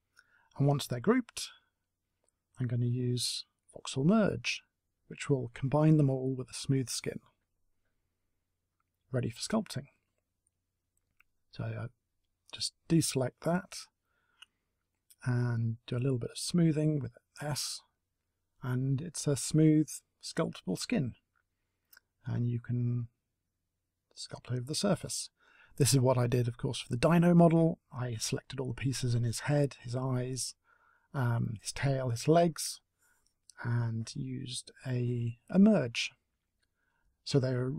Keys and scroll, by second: 12.8 space, 14.6 s, 14.9 s, 19.5 space, 24.8 s, 30.1 Delete.